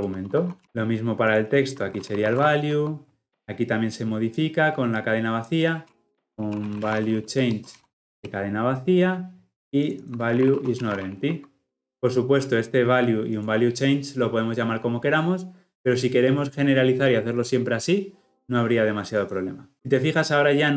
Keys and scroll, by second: 0.6 Escape, 2.7 Escape, 7.3 Return, 11.9 Escape.